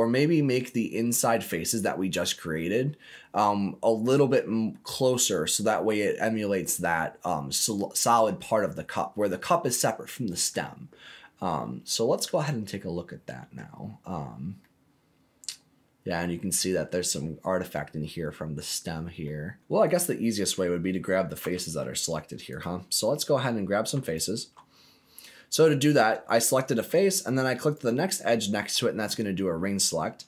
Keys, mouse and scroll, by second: 0.1 middle click, 0.4 middle click, 8.8-9.1 scroll down 2, 9.1-10.6 scroll up 2, 10.6-13.5 middle drag, 13.8-14.6 scroll up 3, 14.6-16.1 middle drag, 18.7-19.2 scroll down 2, 19.2 middle click, 19.6 scroll up 2, 19.8 click, 21.4 3, 22.5 click, 24.0 alt+click, 25.7 click, 27.5 alt+click, 29.6 scroll up 2.